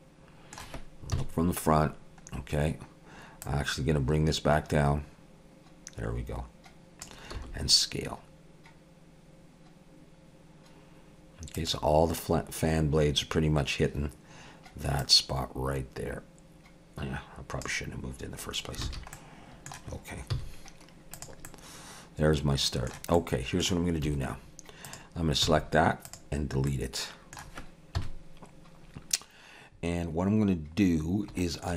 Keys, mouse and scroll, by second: 1.1 KP_1, 2.3-3.4 scroll down 1, 3.4 click, 7.3 s, 15.0 click, 18.9 alt+a, 19.2 middle click, 20.3 z, 21.5 middle click, 23.2 middle click, 24.1 1, 24.8 click, 25.4 x, 26.7 middle click, 28.0 KP_1, 30.9 scroll down 1, 31.4 shift+middle click.